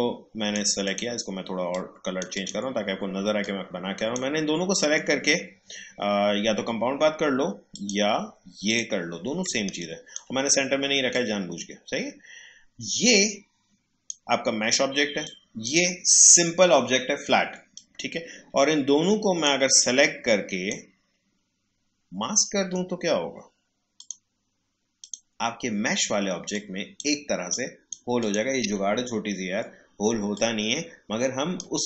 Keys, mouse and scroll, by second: 4.8 right click, 7.7 click, 9.4 space, 9.7 click, 10.1 space, 11.1-22.5 drag, 22.5 right click, 23.9-31.8 drag.